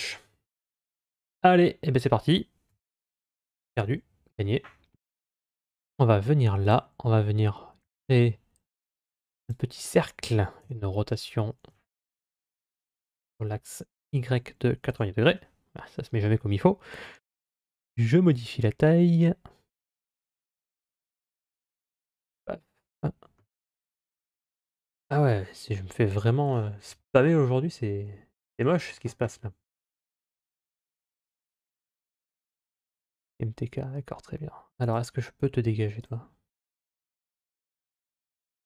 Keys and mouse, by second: 2.5 KP_7, 3.5 KP_3, 7.7 shift+a, 10.4 r, 17.0 s, 22.6-23.5 shift+middle drag.